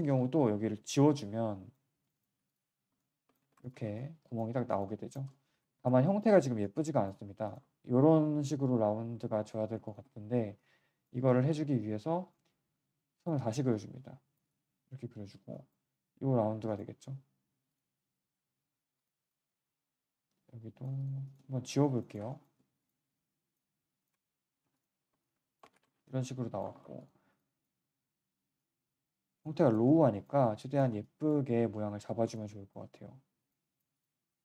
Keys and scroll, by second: 0.7 Delete, 2.3 Delete, 3.4 3, 5.7 1, 11.5 z, 17.5 q, 24.6 Delete, 25.7 3, 26.7 1, 27.7 w, 27.9 w.